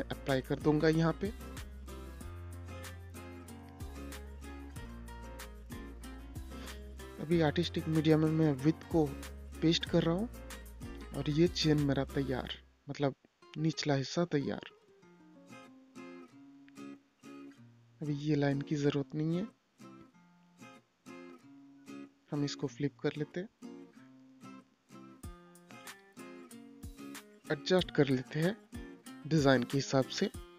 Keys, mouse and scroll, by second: 1.9 click, 6.0 i, 7.5 click, 8.4 ctrl+v, 9.0 Return, 11.7 space, 12.1 click, 13.1 right click, 13.9 click, 19.2 shift+Page_Down, 20.5 click, 25.1-25.5 scroll up 1, 26.1-29.8 drag.